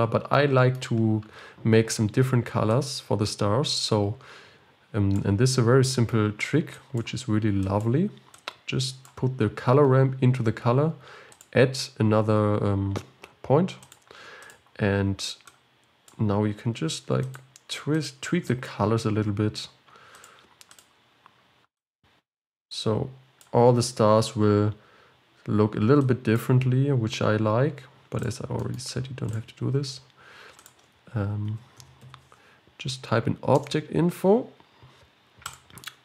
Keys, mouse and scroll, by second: 0.0 click, 5.4 click, 6.8-15.5 drag, 20.3-21.8 drag, 26.4-36.0 drag.